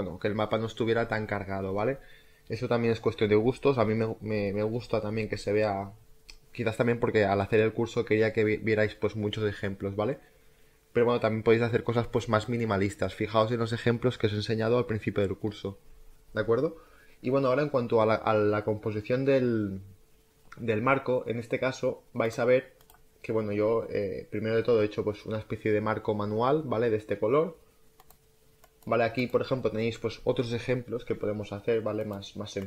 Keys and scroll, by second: 22.2 space.